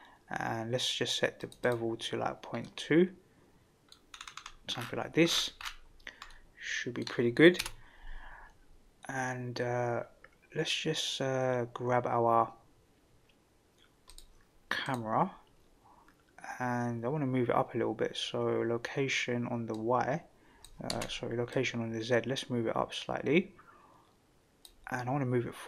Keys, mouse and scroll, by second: 1.4 click, 1.6 click, 2.6-3.9 middle drag, 4.1-4.7 scroll up 5, 4.7-5.6 scroll down 6, 6.3-7.0 middle drag, 7.6 KP_0, 14.1 click, 14.8 click, 19.7 click, 20.9 ctrl+z, 21.5-24.7 drag.